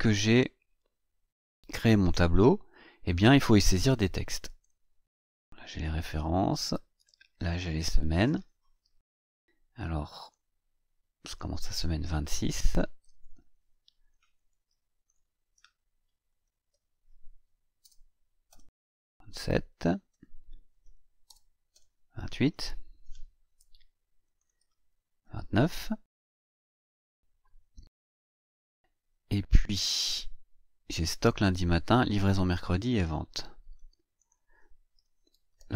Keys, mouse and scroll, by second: 1.7 click, 3.0 click, 4.2-8.3 typing, 5.5 Tab, 10.2 click, 11.2 click, 12.7 space, 12.9 KP_2, 13.1 KP_6, 14.3 click, 15.5 ctrl+c, 16.2 ctrl+click, 16.6 ctrl+v, 17.7 BackSpace, 18.4 KP_7, 19.7 ctrl+click, 20.0 ctrl+v, 21.2 BackSpace, 21.6 KP_8, 24.2 ctrl+click, 24.5 ctrl+v, 25.7 BackSpace, 26.2 KP_9, 29.8 click, 32.7 click, 34.2 click, 34.6-35.7 typing.